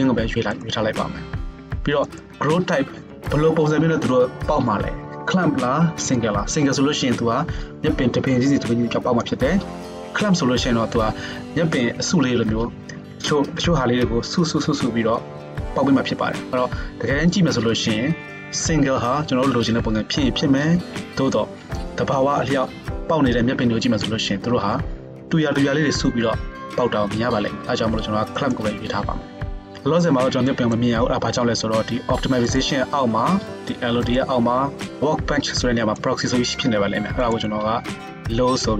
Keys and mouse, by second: 0.7-2.0 middle drag, 2.0-34.2 drag, 34.2-35.4 middle drag, 35.4-38.7 drag.